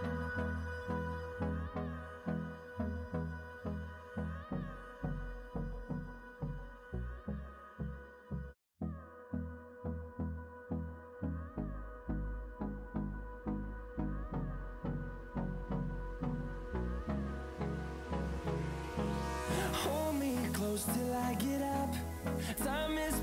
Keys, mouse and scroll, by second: 0.6 click, 4.2 scroll up 1, 4.2 typing, 6.6 typing, 6.6 click, 10.5 click, 14.4 scroll down 1, 18.0 scroll up 1, 19.3 click.